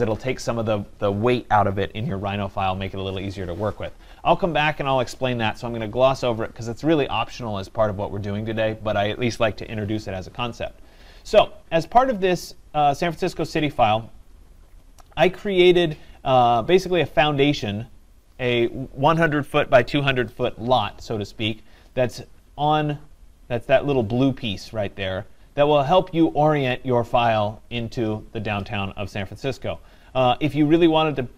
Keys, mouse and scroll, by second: 13.0-17.3 middle drag, 17.3 scroll, 19.9 right click, 22.4-23.5 scroll.